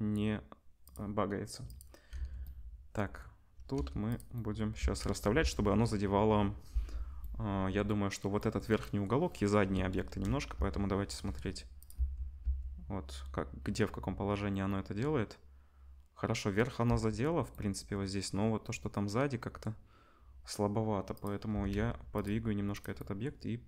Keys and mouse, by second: 0.9-1.6 middle drag, 1.6-4.1 drag, 2.1 ctrl+s, 3.7 g, 4.1-21.1 middle drag, 4.7 space, 5.4 space, 10.0-12.4 typing, 16.8 space, 21.1-22.3 drag, 21.5 r, 22.3-23.6 middle drag, 22.3 g.